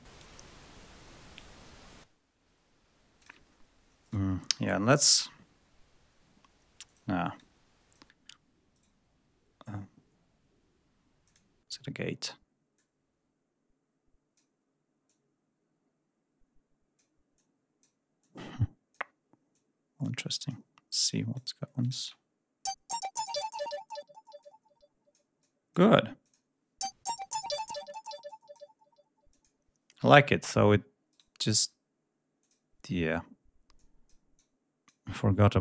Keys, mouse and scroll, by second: 1.8-3.4 drag, 4.0 right click, 6.8 click, 7.3 click, 8.7 right click, 11.2 click, 12.7-14.5 drag, 15.0-17.1 drag, 17.3 click, 18.1 click, 19.4-20.1 drag, 20.2-20.6 drag, 21.0 click, 21.7 click, 21.9 space, 24.3-25.3 drag, 25.3-25.8 drag, 26.1 click, 28.2 click, 29.2 click, 29.9 space, 31.0 right click, 32.3 click, 33.7 click, 34.3 click.